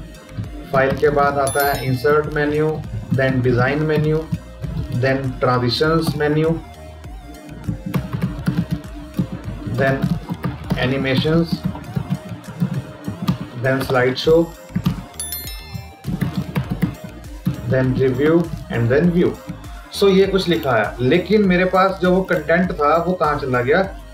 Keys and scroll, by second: 8.5 space, 11.9 space.